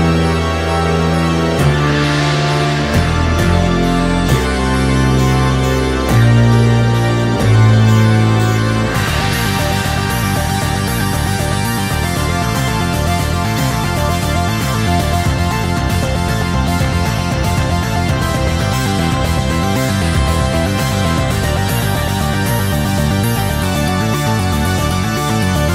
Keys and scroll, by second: 0.4 Escape, 8.4 space, 14.4 space, 20.4 space, 25.6 space.